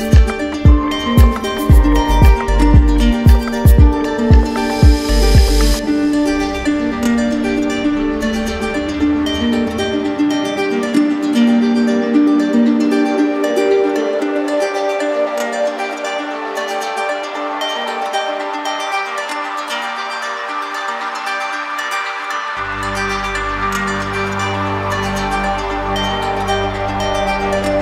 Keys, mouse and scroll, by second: 2.0 click, 2.8 alt+click, 4.3 click, 4.5 click, 4.8 alt+click, 5.6 click, 6.2 click, 6.9 z, 7.6 click, 8.5 click, 9.6 click, 14.5 right click, 21.7 click, 22.8 click, 23.8 alt+click.